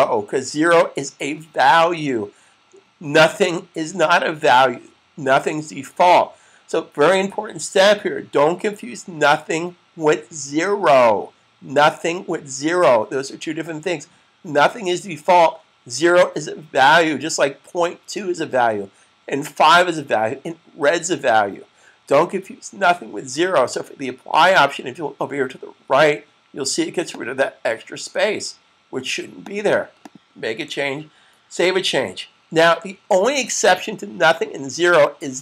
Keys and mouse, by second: 26.9 click, 30.8 super+s.